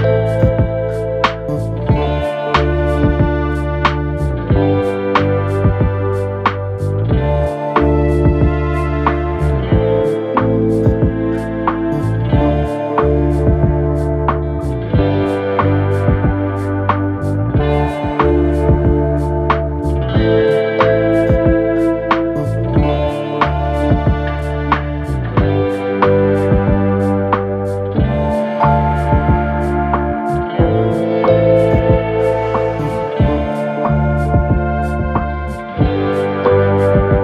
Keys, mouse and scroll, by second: 0.6 ctrl+click, 2.7 ctrl+click, 4.0-8.1 drag, 10.9 shift+click, 12.3 ctrl+click, 13.5 ctrl+click, 15.1-22.9 drag, 35.9 ctrl+c, 36.6 ctrl+v.